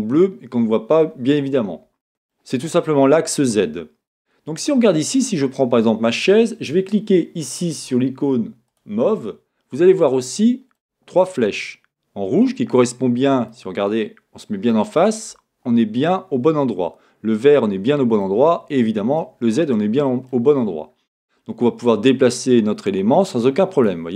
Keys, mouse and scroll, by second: 4.2-4.7 scroll up 2, 4.7-5.1 scroll up 1, 5.1 click, 5.3-9.1 middle drag, 9.1 click, 9.9-21.9 middle drag, 15.0-16.0 scroll down 1, 20.6-21.3 scroll up 2, 22.1-24.1 drag.